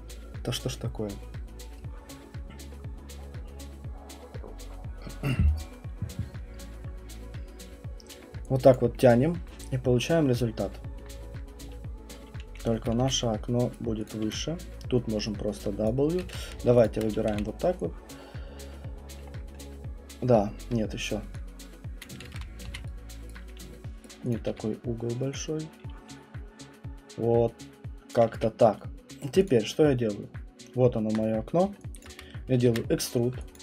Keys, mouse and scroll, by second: 8.7 alt+click, 9.3 alt+middle click, 9.9 middle click, 10.3 middle click, 10.9 middle click, 13.0 q, 13.7 right click, 14.1 click, 14.2 w, 15.9 click, 16.2 ctrl+z, 16.8 shift+click, 17.3 r, 19.1 click, 19.3 middle click, 19.4 middle click, 20.6 alt+click, 22.0 alt+click, 22.3 ctrl+z, 22.6 q, 23.3 right click, 24.0 right click, 24.3 click, 24.5 w, 28.1 click, 28.3 q, 29.2 middle click, 29.5 click, 29.5 right click, 32.0 click, 32.7 ctrl+e, 33.5 alt+click.